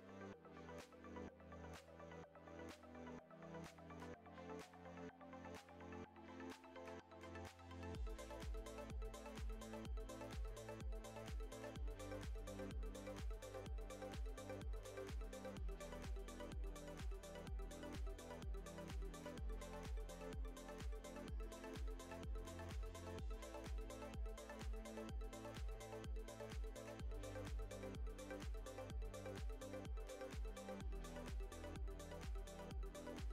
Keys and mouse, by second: 0.2-0.5 middle drag, 0.9 i, 1.9 s, 3.6 s, 5.7-6.2 middle drag, 6.4 s, 8.9 middle drag, 10.4 ctrl+r, 11.9 i, 13.7 g, 15.5 e, 17.0 click, 17.4 middle click, 18.4 e, 20.9 middle click, 22.2 middle click, 23.0 ctrl+Tab, 24.0 shift+middle drag, 24.8 shift+a, 26.1 g, 27.4 s, 29.0 s, 30.0 g, 31.9-32.2 middle drag, 32.3 g, 33.1 g.